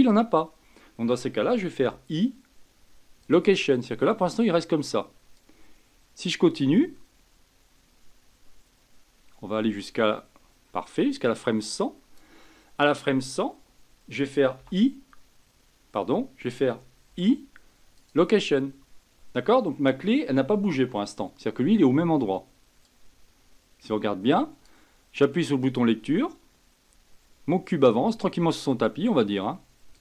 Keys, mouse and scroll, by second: 1.8 i, 5.4-8.5 drag, 17.1 i, 22.8-26.3 drag, 29.9 click.